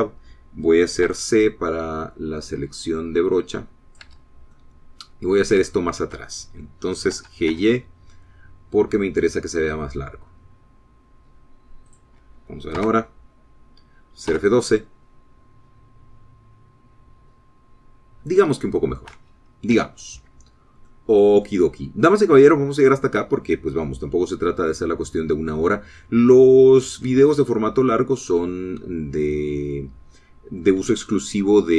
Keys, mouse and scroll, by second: 2.4 c, 2.8-5.5 drag, 5.4 Escape, 5.9 middle click, 7.0 shift+click, 7.0 shift+middle click, 7.5 shift+scroll up 1, 7.6-11.5 shift+middle drag, 8.5 g, 8.9 y, 13.3 click, 14.1 KP_0, 15.7 F12, 18.8 scroll down 2, 19.5 scroll up 2, 21.1 Escape, 22.2 middle click, 23.0-23.3 scroll down 2, 23.5-25.4 drag, 25.6 scroll down 1, 26.0-28.6 drag, 28.6 middle click, 28.7-29.1 scroll up 1, 29.1 middle click, 29.5-31.7 drag.